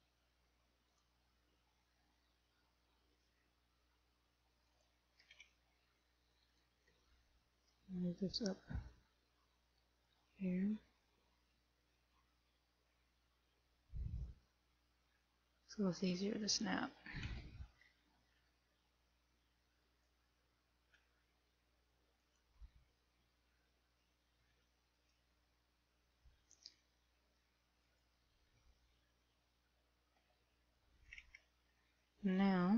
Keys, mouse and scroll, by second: 1.2 x, 5.2 shift+right click, 5.6-6.0 scroll down 2, 6.7 shift+right click, 7.9 click, 11.5 click, 13.5 scroll down 1, 15.5 middle click, 17.6 a, 18.3-18.6 scroll up 3, 18.9 middle click, 20.4 right click, 21.5 g, 23.5 middle click, 25.5 right click, 26.6 g, 30.5 KP_7, 31.5-31.8 scroll down 3.